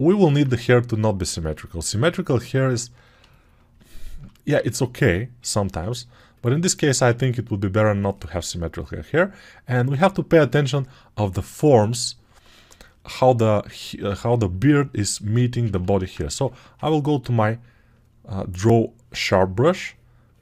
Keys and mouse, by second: 6.0-20.4 alt+drag, 15.5 ctrl+z, 15.7 ctrl+z, 16.2 1.